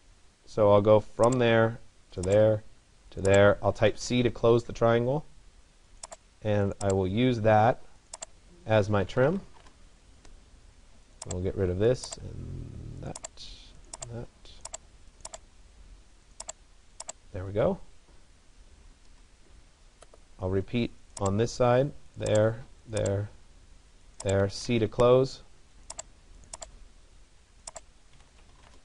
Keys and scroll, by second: 3.8 Return, 9.3 Return, 18.8 Return, 24.4 Return.